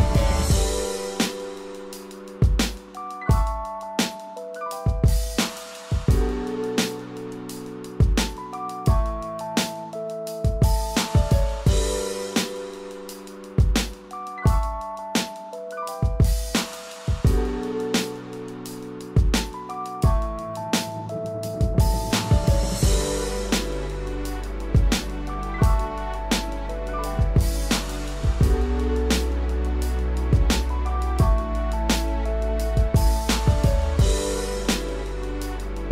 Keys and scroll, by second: 2.7 ctrl+=, 11.5 ctrl+Return, 13.8 ctrl+d, 19.4 ctrl+0, 20.8 ctrl+=, 28.7 ctrl+Return, 30.7 ctrl+d, 32.7 ctrl+=.